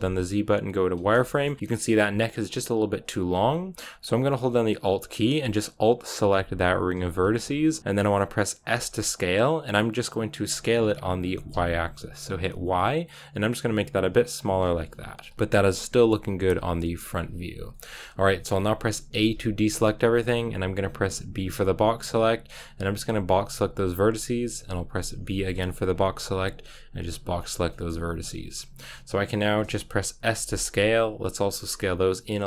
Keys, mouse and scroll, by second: 0.9 z, 1.2-5.9 shift+middle drag, 5.9-7.1 alt+right drag, 7.1-8.6 scroll up 1, 8.7 s, 15.2 KP_1, 16.4 KP_3, 17.6-19.1 shift+middle drag, 19.1 a, 27.3 b, 27.6 shift+middle click, 28.1-30.2 scroll down 1, 30.2 s.